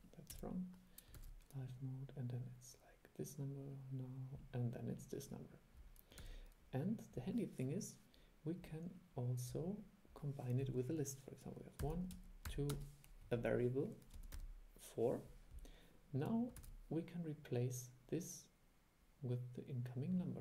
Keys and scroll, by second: 1.3 super+e, 6.3 super+e, 16.7 super+e.